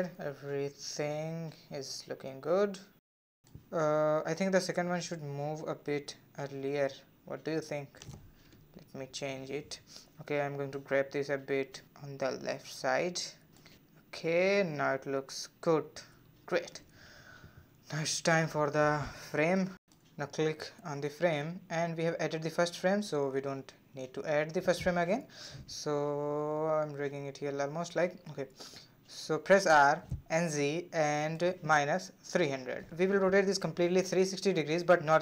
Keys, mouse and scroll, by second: 2.2-3.3 middle drag, 3.3-6.4 drag, 8.8-9.8 drag, 10.2 click, 12.6 click, 12.9 space, 14.0-15.0 drag, 15.0-15.9 middle drag, 15.9 space, 16.8 space, 17.4 space, 18.2-20.3 drag, 20.8 scroll down 2, 21.0-22.5 middle drag, 22.5 click, 23.2-26.3 drag, 28.6 r.